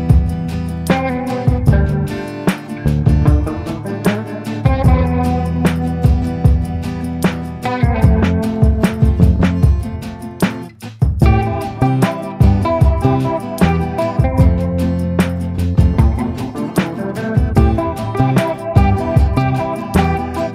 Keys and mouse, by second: 0.3 click, 0.9 click, 1.5 click, 2.7 click, 3.0 click, 3.9-5.2 drag, 7.1 click, 7.9-8.5 ], 8.5 click, 10.5 middle click, 11.9 click, 12.6 a, 13.7 middle click, 15.8-17.4 middle drag, 17.9 middle click, 19.2 middle click, 20.0-20.5 shift+middle drag.